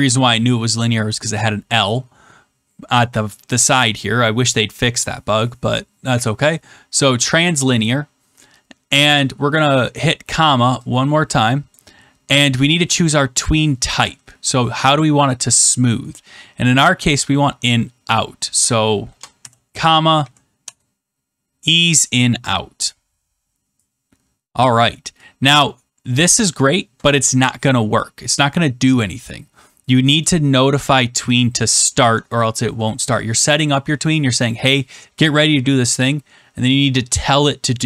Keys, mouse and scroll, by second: 9.0-10.0 scroll, 11.7 click, 13.9-14.9 scroll down 1, 17.2 click, 18.1 click, 19.1 BackSpace, 20.5 Return, 24.5 click, 26.2 click, 26.8 Return, 30.2 click, 30.8 click.